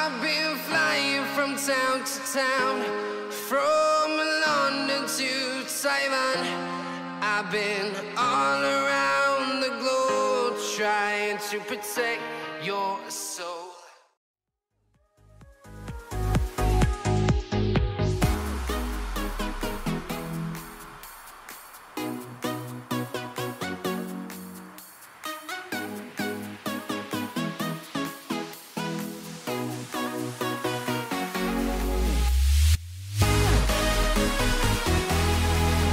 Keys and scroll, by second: 6.1 space, 7.1 ctrl+v, 31.3 ctrl+g.